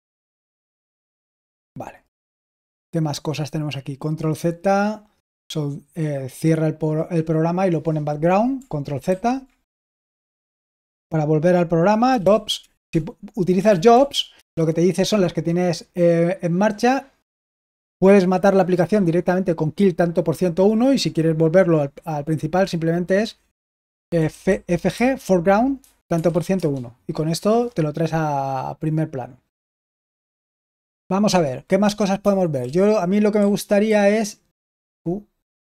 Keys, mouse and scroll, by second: 0.8 ctrl+c, 9.0 ctrl+z, 11.7-14.4 typing, 24.1-26.8 typing, 31.2-33.8 typing, 34.8 Escape.